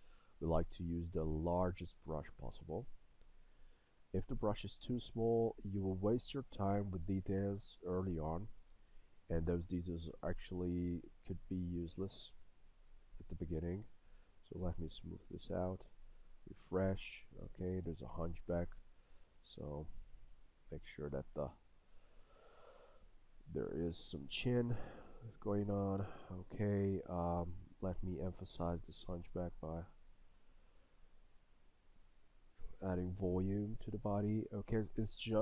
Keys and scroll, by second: 2.6 s, 27.3 s.